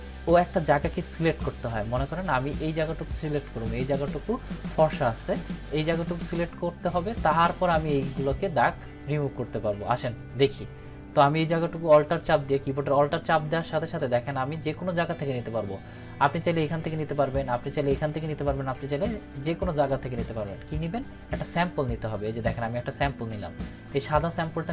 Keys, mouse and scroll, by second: 22.5 alt+click.